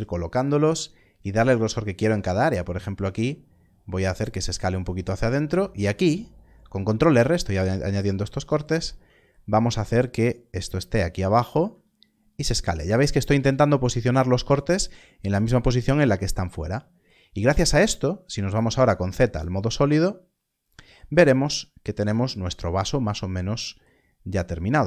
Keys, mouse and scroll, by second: 0.3 click, 2.3 s, 4.4 click, 5.3 ctrl+r, 7.5 ctrl+r, 7.5 click, 8.3 right click, 9.6 g, 9.7 z, 11.3 click, 11.6 s, 13.2 click, 18.7 z, 19.4 click, 21.1-22.7 scroll down 1, 24.0-24.3 scroll down 1, 24.3 scroll up 1.